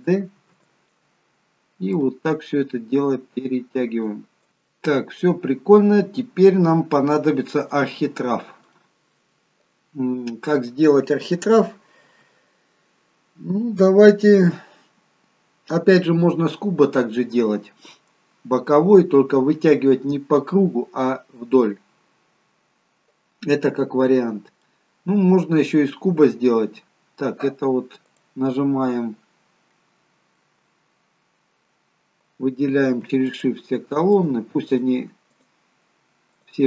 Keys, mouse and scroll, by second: 0.4 shift+d, 2.0 click, 4.4 middle click, 4.4-5.1 scroll up 3, 5.3-5.9 scroll up 1, 5.9-6.5 scroll down 2, 6.8 middle click, 8.5-9.0 scroll down 1, 9.0 middle click, 24.0-24.5 scroll up 1, 24.5 middle click, 28.0 click, 29.5-30.2 scroll down 1, 30.2 middle click, 33.2-36.6 shift+click.